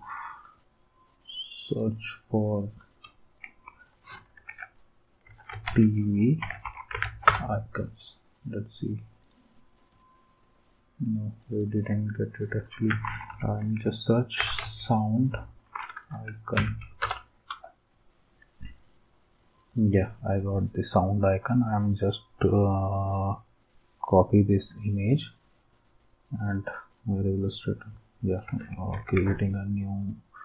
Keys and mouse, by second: 1.6 click, 2.5 click, 5.3-7.5 typing, 9.2-10.2 right drag, 11.4 click, 12.8-15.1 typing, 16.6 Down, 17.0 Return, 19.7-20.7 right drag, 20.8-21.8 right drag, 24.0-25.0 right drag, 27.3 click, 27.5 right click, 28.9 ctrl+n.